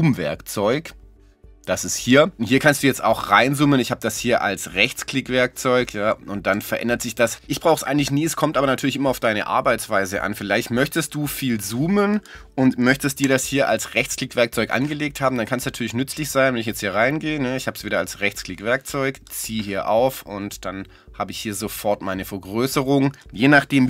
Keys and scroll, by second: 13.2 z.